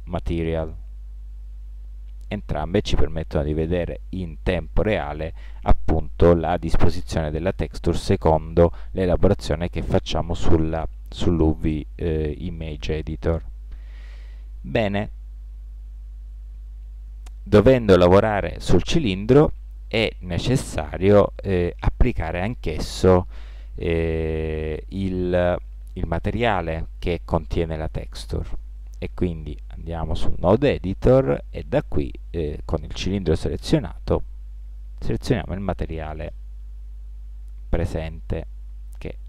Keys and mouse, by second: 0.8-1.1 drag, 1.3 middle drag, 1.7 middle click, 1.9 middle click, 2.3-3.0 middle drag, 3.3 middle click, 5.6-6.9 middle drag, 7.1-8.2 middle drag, 28.7-29.2 drag.